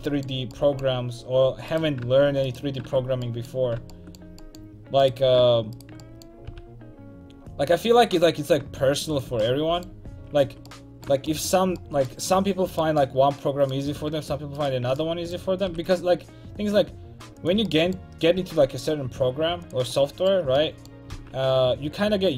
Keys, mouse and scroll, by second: 1.8-3.7 right drag, 3.6 click, 3.7 middle click, 6.5 g, 9.4-10.5 drag, 10.5 a, 10.6 click, 12.1 click, 13.1-15.4 right drag, 15.7 g, 18.4 r, 21.2 g.